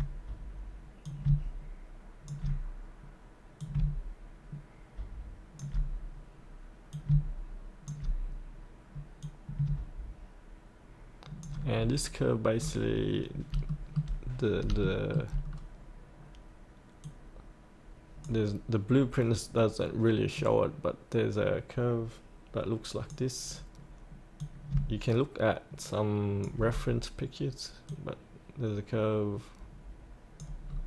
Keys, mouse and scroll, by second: 1.1-2.8 drag, 6.9 click, 7.2-11.7 alt+drag, 11.7 scroll up 1, 12.6 scroll down 1, 13.7 shift+middle click, 14.4 scroll up 1, 14.8 shift+middle click, 15.5 scroll down 1, 17.0-27.1 drag, 27.9-30.7 drag.